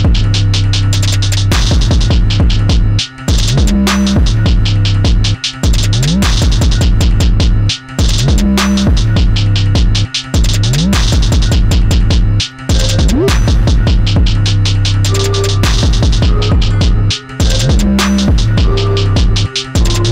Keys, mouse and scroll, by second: 0.8 click, 2.5 click, 3.2 click, 3.7-6.7 right drag, 6.7 click, 7.9 click, 9.1 click, 9.5-10.8 middle drag, 10.8 click, 12.6-14.0 right drag, 14.0 click, 14.6 click, 15.9 click, 18.0 e.